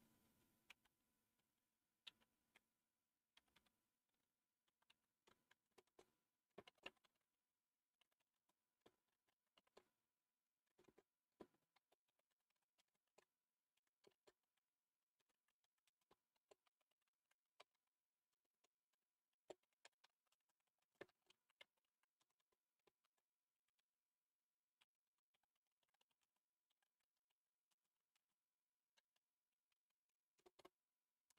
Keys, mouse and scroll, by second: 0.6-3.4 typing, 4.6 typing, 5.6 Return, 5.7 Return, 6.6-7.0 typing, 8.1-30.4 typing.